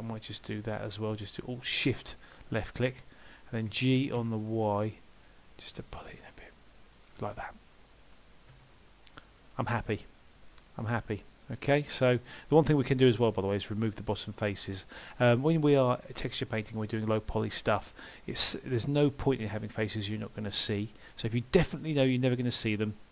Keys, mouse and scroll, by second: 0.3 alt+shift+click, 1.0 middle click, 3.7 g, 8.1-8.5 scroll down 1, 8.5 Tab, 8.8 middle click, 17.5 middle click.